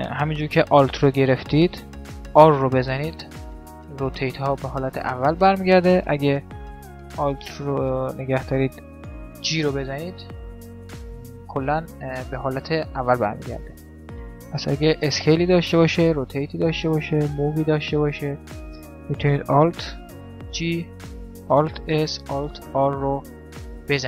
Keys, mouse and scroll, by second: 2.2 alt+r, 9.2 alt+g, 10.2-15.8 middle drag, 14.5 s, 15.8 r, 17.3 g, 20.2 alt+g, 21.6 alt+s, 22.4 alt+r, 23.1-24.0 middle drag.